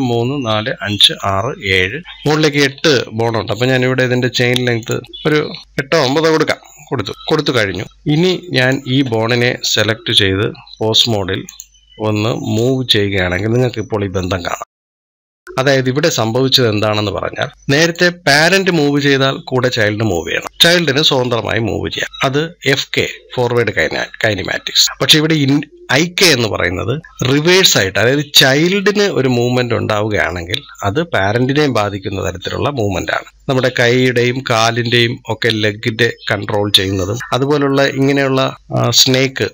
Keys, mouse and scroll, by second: 1.9 scroll down 2, 2.5 scroll up 2, 4.7 click, 7.8 scroll up 1, 8.4 click, 11.3-12.5 drag, 29.1 click.